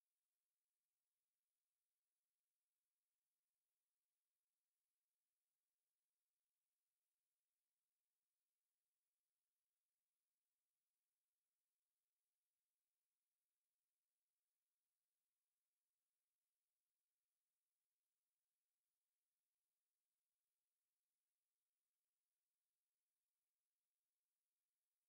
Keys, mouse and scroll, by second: 11.3 n.